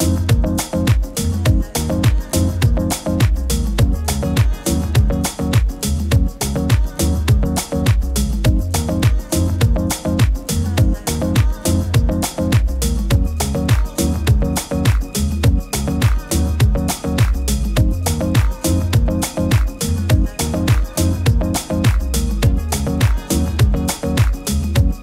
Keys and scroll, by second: 3.5 super+-, 3.6 super+-, 3.7 super+-, 5.2 super+s, 7.7 super+g, 13.3 super+g, 18.1 super+g.